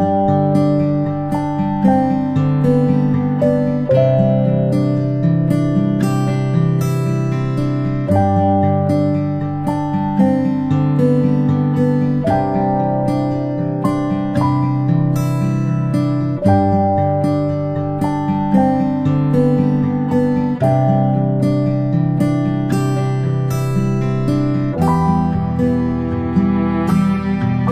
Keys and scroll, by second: 13.2 ctrl+shift+space, 13.4 ctrl+shift+space, 13.5 ctrl+shift+space, 14.4 Up, 14.7 Down, 15.1 Left, 15.6 Up, 15.7 Down.